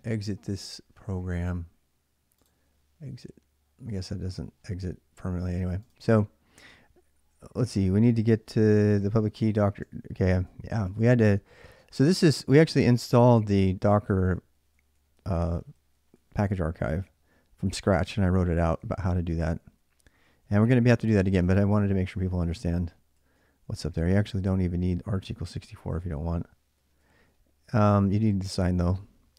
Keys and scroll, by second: 7.1-28.1 typing.